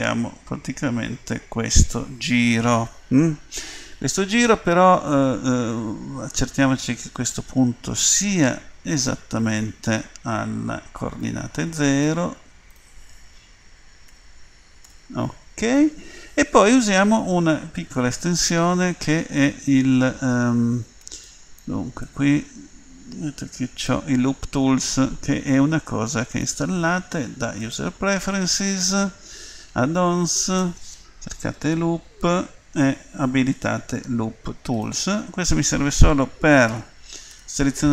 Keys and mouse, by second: 10.7-26.3 drag, 36.6 a, 37.3 a.